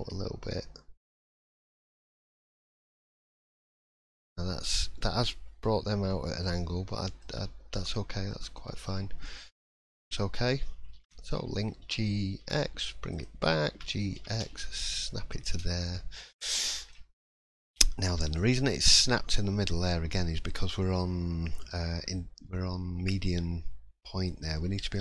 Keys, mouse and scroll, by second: 3.8 click, 4.1 middle click, 6.5 middle click, 7.3-7.7 scroll down 2, 7.8-8.6 scroll up 2, 8.3 middle click, 8.6-8.9 scroll down 3, 8.9 shift+middle click, 9.4 middle click, 10.9 l, 11.8 g, 15.8 middle click, 16.5 shift+middle click, 16.9 scroll up 1, 17.4 middle click, 18.4 shift+middle click.